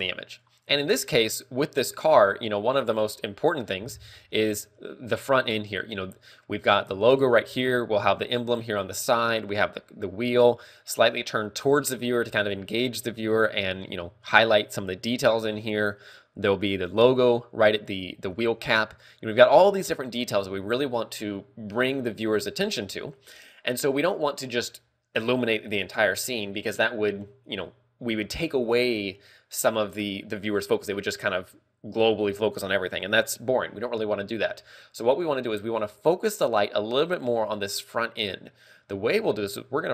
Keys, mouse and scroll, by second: 0.8 click, 2.0 scroll up 1, 2.6 scroll down 1, 18.8 scroll up 1.